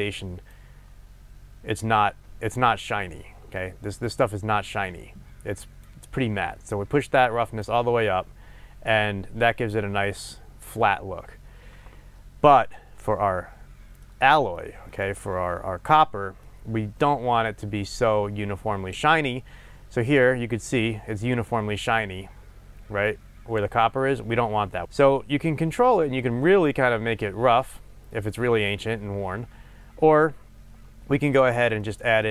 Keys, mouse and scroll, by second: 0.5-12.7 drag, 9.3 scroll up 2, 11.1 scroll down 1, 12.7-20.3 middle drag, 20.3-31.9 drag, 31.9-32.3 middle drag.